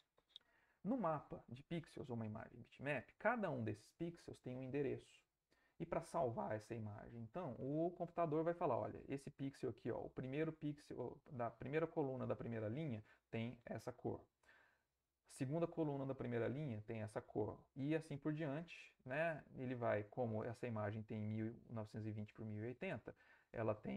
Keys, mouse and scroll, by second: 2.7 middle click, 7.7 middle click, 18.5 middle click, 18.5 scroll up 2, 20.1 ctrl+middle click, 22.4 middle click.